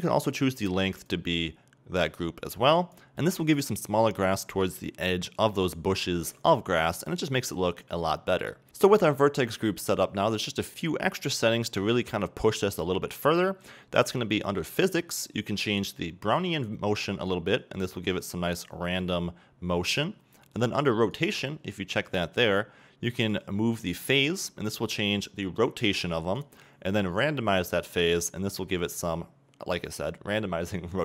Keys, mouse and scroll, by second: 1.1-3.1 drag, 3.1-3.5 middle drag, 4.3 middle click, 6.8 middle click, 7.4-8.7 middle drag, 8.7-10.8 scroll down 2, 17.6-31.0 drag.